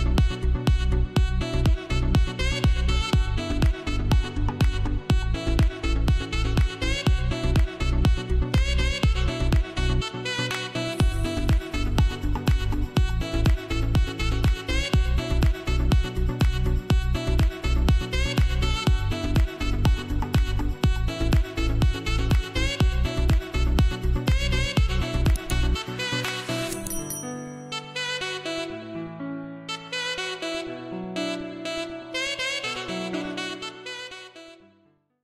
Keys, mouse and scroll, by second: 0.0-2.0 typing, 0.2 click, 0.8 click, 2.1 click, 2.5 scroll down 1, 4.5 scroll up 1, 6.4 space, 6.6 click, 7.0 space, 8.3 scroll up 1, 8.4 space, 8.7 click, 9.0 space, 10.6 ctrl+Tab, 22.6 ctrl+shift+click, 22.9 ctrl+g, 23.5 click, 30.3 F12.